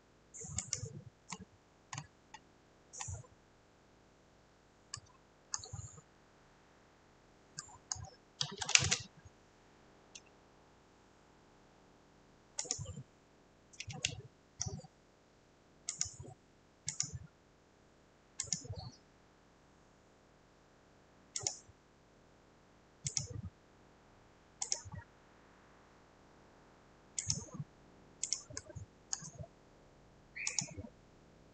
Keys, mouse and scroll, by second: 1.3 Escape, 3.1 scroll, 3.6-4.3 scroll, 4.4 scroll, 6.4 middle click, 7.9 middle click, 8.2 middle click, 8.3-9.2 typing, 9.1 scroll, 12.7 click, 14.5 F8, 16.1 click, 17.1 click, 18.6 click, 21.5 click, 23.3 click, 24.8 click, 27.3 click, 29.1 scroll, 30.6 click, 31.4-31.5 scroll.